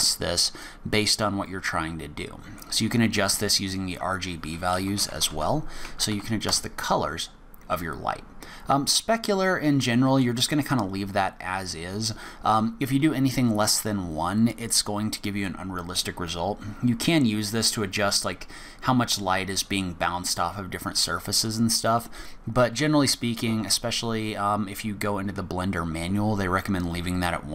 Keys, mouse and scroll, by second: 9.8 middle click, 11.2 scroll up 1, 15.4 click, 21.4 click.